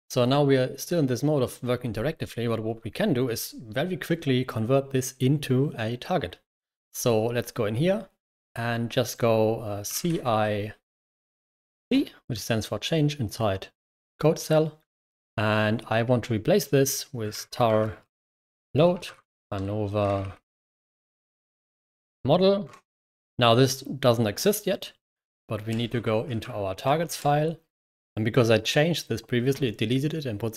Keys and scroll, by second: 9.8-10.5 typing, 11.7 typing, 16.8-23.0 typing, 25.4-27.1 typing.